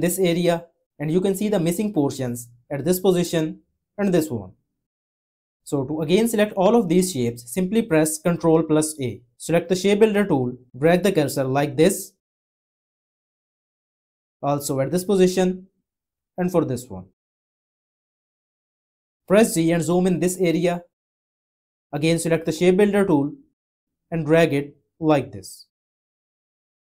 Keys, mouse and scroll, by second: 8.6 ctrl+a, 20.5 z.